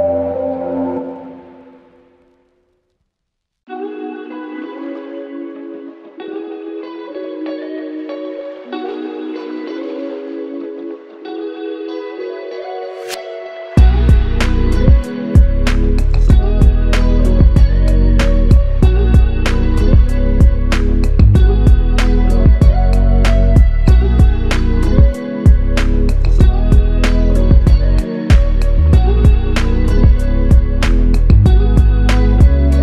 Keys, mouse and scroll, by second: 17.2 alt+click, 18.5 ctrl+click, 21.7 ctrl+click, 23.6 alt+click, 24.3 w, 26.1 alt+click, 31.2 q.